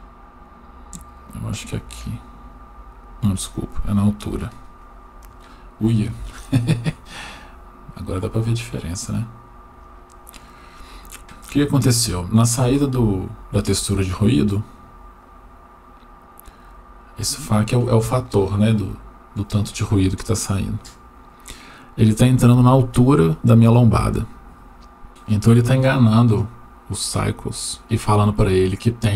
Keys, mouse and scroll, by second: 1.2 click, 1.4 click, 3.2-3.9 drag, 6.2-8.1 shift+middle drag, 8.5-9.3 scroll down 2, 9.8 middle click, 12.0 click, 12.8 shift+middle click, 14.3-15.1 drag, 20.7-22.9 drag.